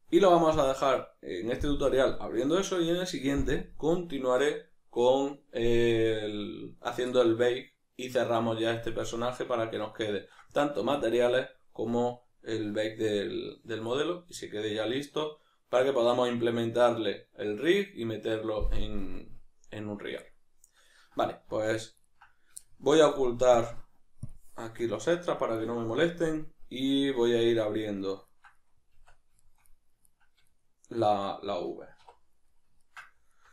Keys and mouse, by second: 6.8-23.6 middle drag, 21.5 z, 23.6-24.8 drag, 24.8-33.3 ctrl+middle drag, 26.1 KP_Decimal, 28.9 Tab, 32.0 2, 33.3-33.5 alt+right drag.